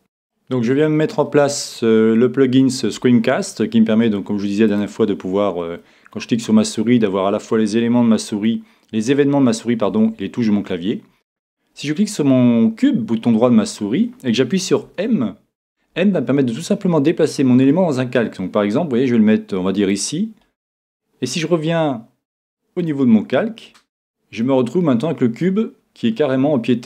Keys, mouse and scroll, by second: 0.3-2.0 middle drag, 2.1 middle click, 4.7-6.5 drag, 6.6 click, 10.1 e, 14.8 m, 23.3-24.7 drag, 24.4-26.8 middle drag.